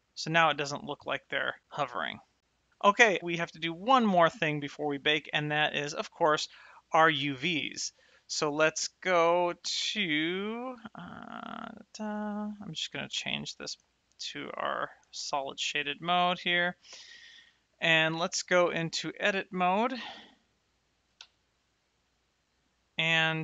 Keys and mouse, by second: 4.8 click, 10.0 click, 12.4 click, 13.8 shift+middle click, 14.5 shift+middle click, 15.1 shift+middle click, 15.4 middle click, 17.1 click, 17.9 Tab, 20.5 click, 21.2 Tab, 22.0 middle click.